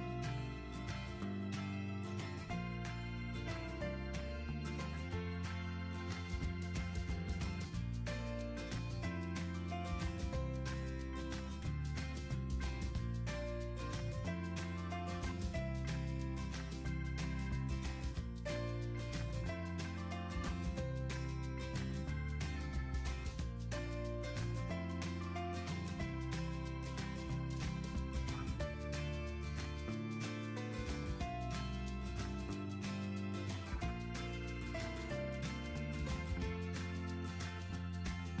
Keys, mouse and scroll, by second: 15.9-16.9 scroll.